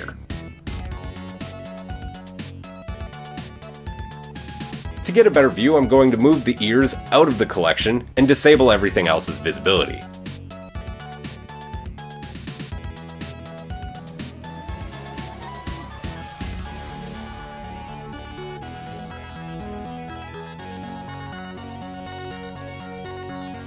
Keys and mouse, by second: 1.5 click, 2.3-5.5 shift+middle drag, 7.1-8.2 drag, 10.0 click, 11.9 g, 13.6 click, 14.6 shift+middle click, 14.9 KP_3, 15.0-17.6 middle drag, 17.6 click, 17.7-18.8 middle drag, 18.8 click, 18.9 right click, 20.8 shift+right click, 21.5 shift+right click, 22.5 g, 22.8-23.6 drag.